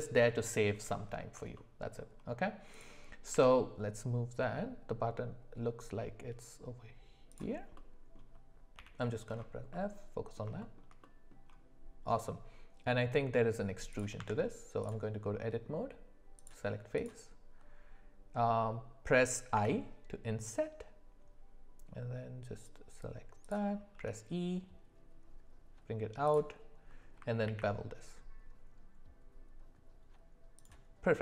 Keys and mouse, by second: 1.5 shift+middle click, 3.3 g, 7.7 middle click, 8.7 f, 9.7-10.4 middle drag, 10.6 shift+middle click, 11.0 middle click, 14.2 Tab, 16.5 click, 16.9 click, 19.5 i, 24.0 e, 27.5 ctrl+b.